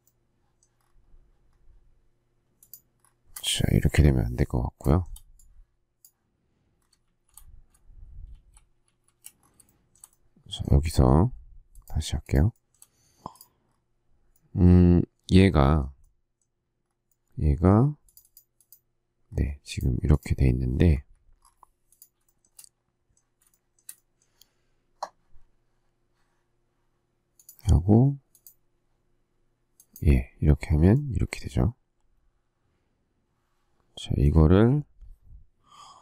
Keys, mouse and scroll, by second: 2.6 shift+click, 3.0-3.7 shift+scroll, 3.9 Delete, 4.8 shift+middle click, 7.0 shift+z, 8.4 shift+a, 8.8 shift+z, 9.7 shift+middle click, 12.2 shift+click, 12.5 shift+middle click, 12.7 shift+double middle click, 20.9 Escape, 22.2 shift+middle click, 23.5 shift+middle click.